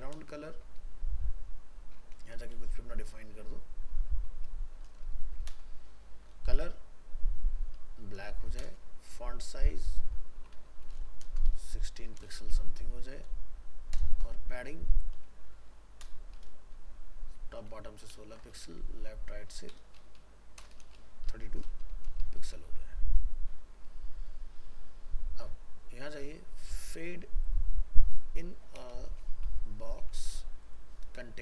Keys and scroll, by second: 22.6 ctrl+s.